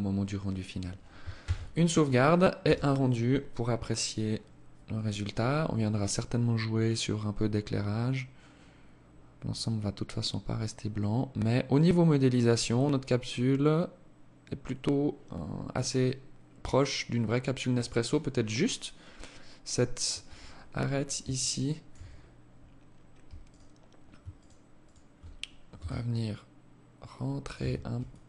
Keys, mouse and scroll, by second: 0.6 ctrl+s, 19.3 Escape, 19.7-20.6 scroll up 6, 20.6 alt+click, 20.6 scroll up 1, 21.2 Tab, 22.7 alt+right click, 23.6 alt+shift+right click, 24.0 alt+shift+right click, 25.0 s, 26.8 Tab, 27.3 alt+click, 28.0 alt+click.